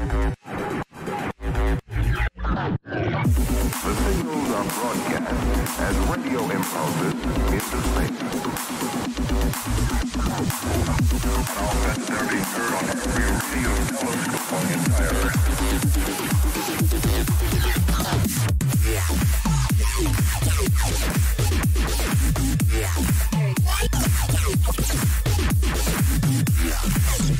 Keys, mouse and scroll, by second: 1.1 Tab, 5.9-11.6 middle drag, 7.2 a, 7.5 a, 13.2-16.3 middle drag, 16.3-18.2 right drag, 18.2 middle click, 20.0-22.2 middle drag, 20.7 a, 22.2-24.1 drag, 24.8-26.6 middle drag, 26.6-27.3 right drag, 27.1 middle click, 27.2-27.3 drag.